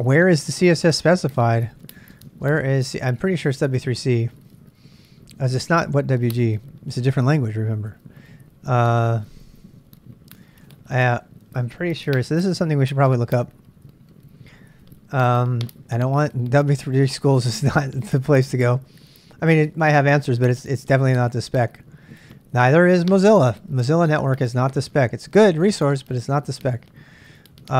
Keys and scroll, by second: 1.4-3.6 typing, 8.8-11.1 typing, 13.1 space.